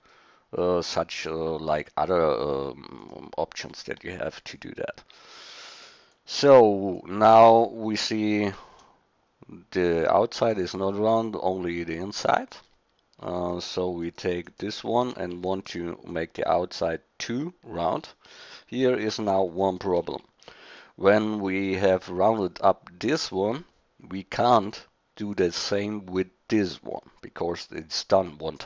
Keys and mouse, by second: 5.1 shift+d, 13.2 x, 14.5 click, 15.3 shift+d, 20.1 Tab.